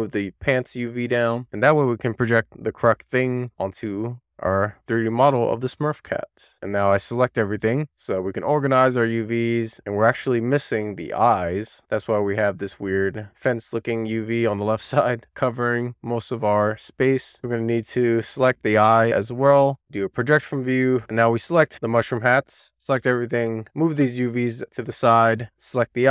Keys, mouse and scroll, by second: 1.1 shift+click, 1.6 shift+click, 1.9 shift+click, 2.2 shift+click, 2.6 shift+click, 4.3 click, 5.3-6.3 scroll down 3, 6.7 Tab, 7.5 a, 17.3 click, 17.5 Tab, 18.0 a, 18.8-19.7 scroll up 1, 19.7-20.5 scroll up 7, 20.8 click, 21.1 Tab, 22.3-23.2 scroll up 1, 23.2 click, 25.6 Tab.